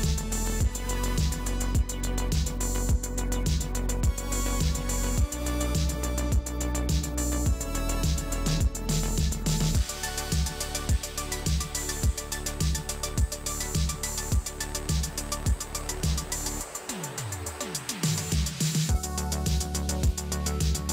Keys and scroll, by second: 18.8 ctrl+alt+z.